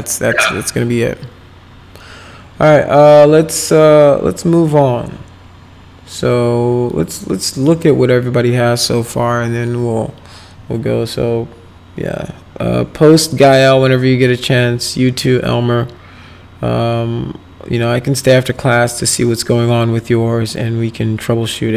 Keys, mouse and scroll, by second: 7.7 click, 13.4 click.